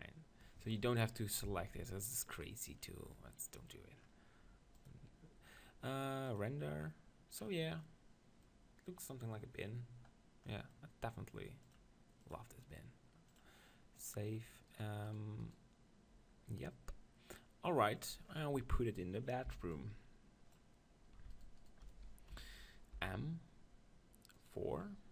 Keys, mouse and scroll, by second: 1.4 Tab, 2.1-3.1 drag, 3.1 middle click, 4.8-6.5 drag, 7.9-9.9 middle drag, 10.6 middle click, 11.7-15.3 drag, 14.7-17.2 right drag, 18.2-21.3 middle drag, 19.5 b, 21.3-23.0 right drag, 22.3 KP_1, 23.0 click, 23.0 m.